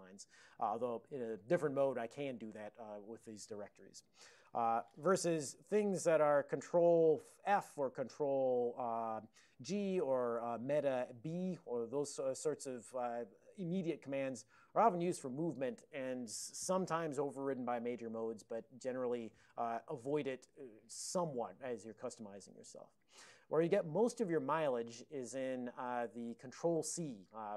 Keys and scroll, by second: 4.1 ctrl+x, 4.5 Return, 13.3 Left, 13.7 Right, 14.2 Right, 25.3 Down, 27.0 Left, 27.0-27.5 Left.